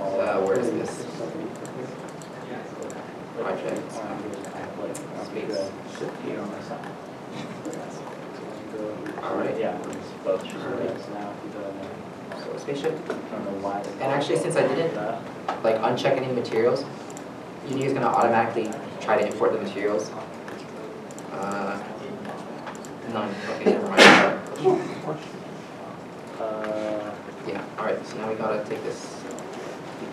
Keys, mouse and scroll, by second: 5.1-6.2 typing, 8.9 p, 10.5 alt+Tab, 10.5 alt+Tab, 13.2 alt+Tab, 22.2 scroll down 1, 24.2 alt+Tab, 25.0 alt+click, 27.5 alt+click.